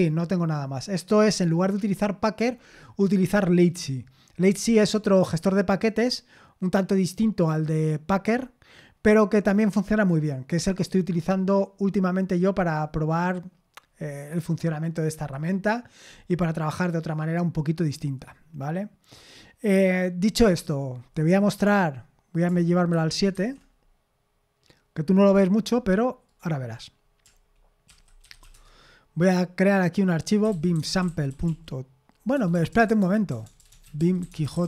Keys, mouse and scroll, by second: 19.1 click, 22.9 super+/, 23.3 super+7, 26.3 click, 27.6-28.9 typing, 30.2-34.6 typing.